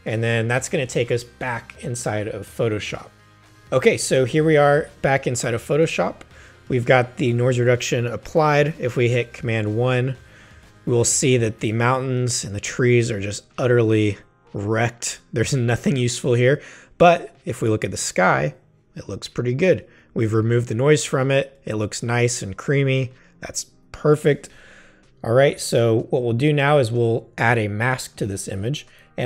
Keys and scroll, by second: 9.2 super+i, 10.5 space, 12.0 space.